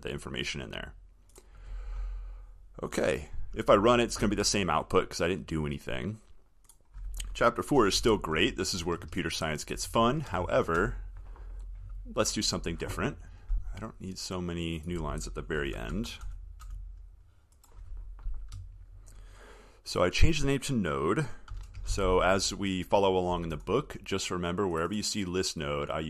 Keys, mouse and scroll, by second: 3.8 ctrl+s.